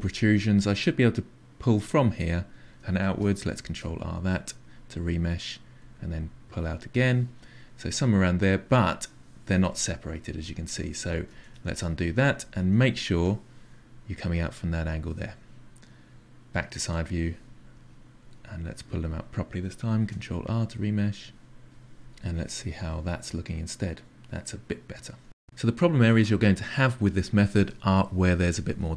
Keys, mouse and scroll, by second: 0.1-1.6 drag, 1.9-3.6 drag, 3.6 ctrl+r, 4.6-5.6 drag, 5.8 click, 6.5 click, 7.4-10.9 middle drag, 10.9 ctrl+z, 11.2 ctrl+z, 11.5-12.0 ctrl+z, 12.2 ctrl+z, 12.4 ctrl+z, 12.5 ctrl+z, 12.7 ctrl+z, 14.2 click, 14.7 click, 16.8 KP_3, 17.7 click, 19.0 ctrl+r, 19.3 click, 19.9-22.1 drag, 22.1-28.9 middle drag.